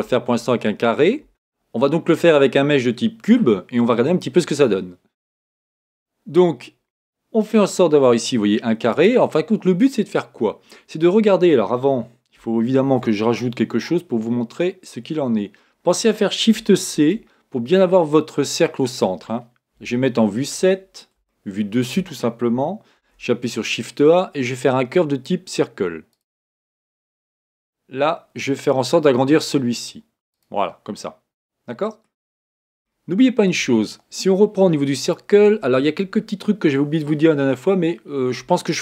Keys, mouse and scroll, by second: 3.6-4.2 scroll down 2, 4.2-5.3 scroll up 3, 8.0-8.9 scroll down 2, 8.9-10.6 drag, 12.8 shift+a, 16.9 shift+c, 19.7 KP_7, 21.3-23.0 shift+middle drag, 23.0 shift+a, 27.4 s, 31.0-35.0 middle drag, 35.0 click.